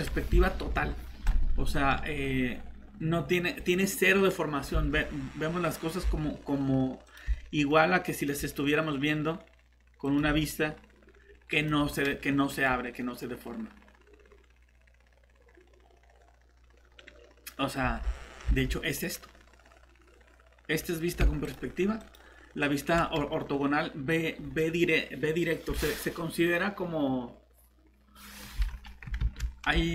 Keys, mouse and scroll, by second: 4.7 alt+Tab, 6.1 alt+Tab, 17.8 alt+shift+Tab, 29.2 ctrl+shift+z.